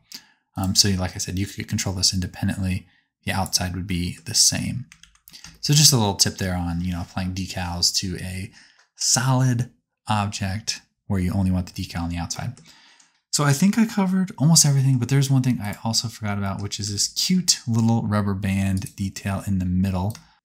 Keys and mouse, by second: 0.5 click, 5.0 ctrl+z, 15.6 click, 16.8 g, 20.1 shift+click.